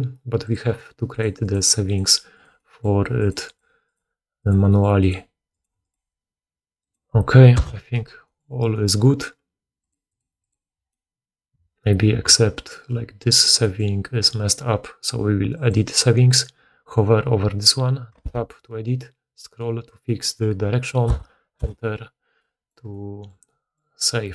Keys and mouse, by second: 1.0 middle click, 9.9 middle click, 10.0 click, 10.1-15.7 middle drag, 10.4 click, 15.5-24.3 drag, 22.8-24.3 middle drag.